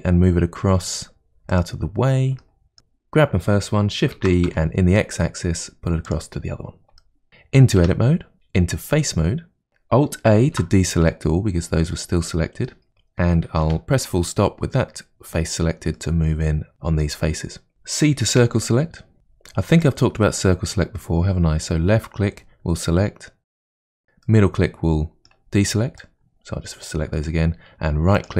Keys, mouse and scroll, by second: 2.0-2.4 scroll down 1, 2.4 shift+middle click, 2.8 click, 4.2 shift+d, 7.0 shift+middle click, 7.8 Tab, 10.4 alt+a, 11.1-12.9 middle drag, 12.9 click, 13.6 KP_Decimal, 14.4-15.4 scroll down 6, 15.4-16.0 scroll down 2, 16.0-17.4 middle drag, 17.4-17.7 scroll down 2, 17.7-18.4 scroll up 6, 18.4 c.